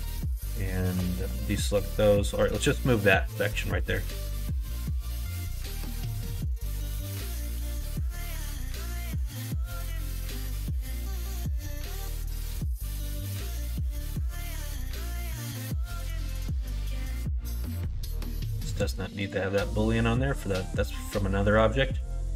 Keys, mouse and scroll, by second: 0.7 alt+shift+click, 1.2 middle click, 1.7 middle click, 3.4-5.0 drag, 6.6-9.9 drag, 9.9 scroll up 1, 9.9 middle click, 10.9 alt+h, 12.1 middle click, 12.5 middle click, 12.9 Tab, 13.4 click, 13.7-15.8 middle drag, 16.6 click, 17.6 right click, 18.5 click, 19.1-21.5 drag, 22.0 click, 22.2-22.3 middle drag.